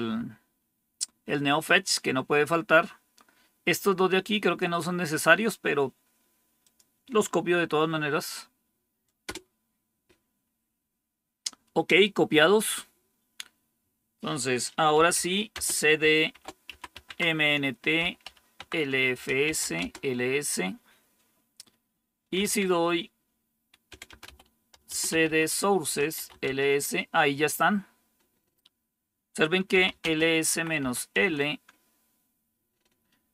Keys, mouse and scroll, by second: 6.5 click, 9.2 Return, 14.6-20.0 typing, 22.0-26.7 typing, 29.4-30.7 typing, 31.1 Return.